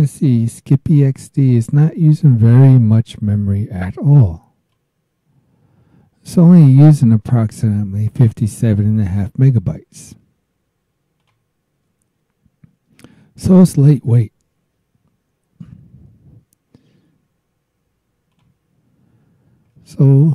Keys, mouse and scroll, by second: 0.0 click, 4.7-7.7 drag, 11.2 click, 18.3 click, 20.1 scroll up 2.